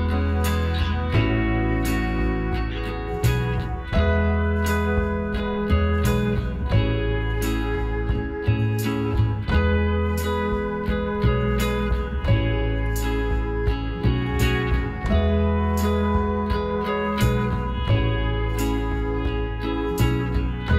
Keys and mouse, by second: 0.6-2.4 middle drag, 6.0 KP_4, 7.5 KP_3, 9.0 KP_9, 9.8 middle click, 11.8-13.6 right drag, 12.7 s, 14.8 z, 15.5-17.0 right drag, 16.6 z, 19.4 s.